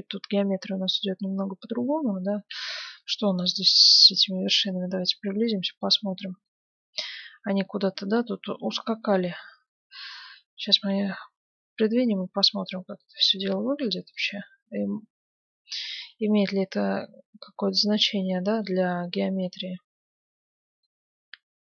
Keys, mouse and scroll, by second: 1.5-4.5 middle drag, 2.5 ctrl+Tab, 3.4-5.1 right drag, 6.5-11.9 middle drag, 10.8 g, 14.9-17.1 middle drag, 16.0 g, 19.4 Tab, 19.8-20.5 scroll up 1, 20.5-20.8 scroll up 1, 20.8-21.6 middle drag.